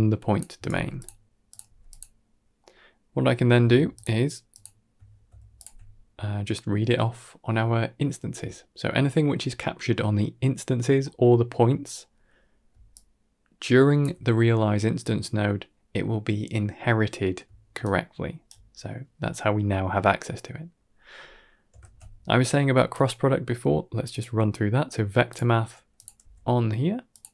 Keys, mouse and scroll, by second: 0.4 a, 0.5 g, 1.3 click, 1.5 g, 2.5 middle click, 2.9 scroll down 2, 3.0 middle click, 3.8 ctrl+shift+click, 4.4 ctrl+shift+click, 5.4 ctrl+shift+click, 10.9 middle click, 11.7 middle click, 12.6 d, 12.8-13.9 drag, 13.9 d, 17.3 d, 17.7 right click, 18.3 d, 20.0 middle drag, 20.6 middle click, 21.0 scroll up 1, 21.2 middle click, 21.6 shift+a, 26.1 g.